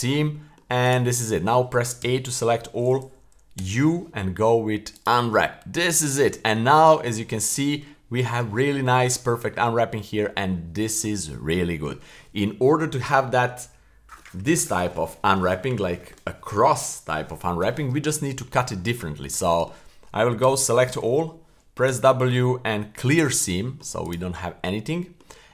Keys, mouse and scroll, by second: 0.3 middle click, 0.8 right click, 2.0 a, 3.6 u, 5.6-6.0 scroll down 1, 6.0 right click, 6.3 middle click, 7.0 a, 9.5-10.2 middle drag, 10.4 middle click, 11.2-11.8 middle drag, 18.8-19.3 middle drag, 19.4 middle click, 20.4 a, 21.9 w, 23.6 middle click, 24.0 right click, 24.9 middle click.